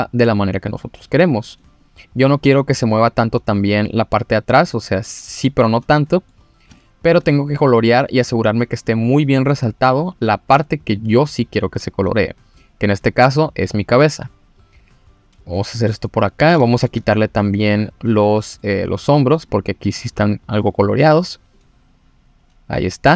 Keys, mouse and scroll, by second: 1.8 click, 4.2 click, 4.7 middle click, 5.4 click, 5.9 middle click, 6.4 scroll down 2, 6.8 shift+middle click, 7.2 middle click, 8.1 click, 8.9 click, 9.0 click, 9.1 click, 9.2 click, 9.7 click, 12.2-12.6 scroll up 1, 12.6 click, 16.0 middle click, 16.6 shift+middle click, 17.7 click, 18.3 middle click, 19.2 click, 19.9 click.